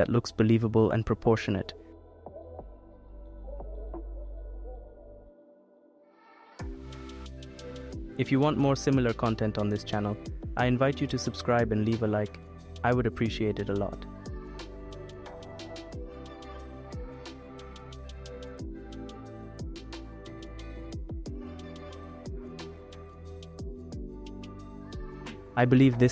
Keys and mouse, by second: 0.2 click, 0.6 click, 1.2 click, 2.1 click, 3.1 click, 5.1 r, 5.2 y, 6.9 g, 7.0 y, 8.1 click, 8.5 click, 9.6-11.0 drag, 11.0 g, 11.3 z, 12.1 click, 13.3 click, 14.5 click, 16.3 click, 17.6 shift+click, 19.4 click, 19.6 click, 20.3 click, 22.8 click, 24.4 click, 25.7 click.